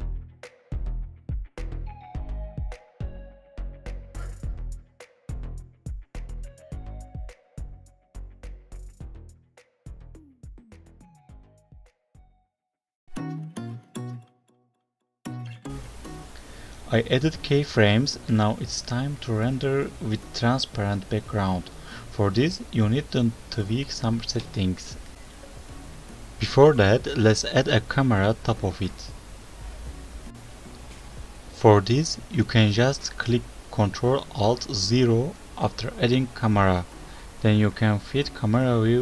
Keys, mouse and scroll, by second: 1.1-1.5 scroll up 5, 1.5 right click, 3.2 click, 3.7 click, 4.4 click, 4.9 click, 6.7 right click, 8.0 right click, 8.7 right click, 9.4 click, 10.1 right click, 11.5 click, 14.5 click, 14.9 alt+right click, 14.9 scroll down 4, 15.6-16.2 scroll up 2, 16.2 scroll down 1, 16.5 alt+right click, 19.7 alt+right click, 24.9 alt+right click, 25.7 shift+a, 26.2 click, 26.5 click, 27.6 click, 28.3 click, 28.9 click, 29.3 click, 31.0 ctrl+alt+KP_0, 33.6 n, 34.4 n, 36.1 click, 37.3 click, 37.6 n, 38.2-38.9 scroll down 1, 38.9-39.0 scroll down 2.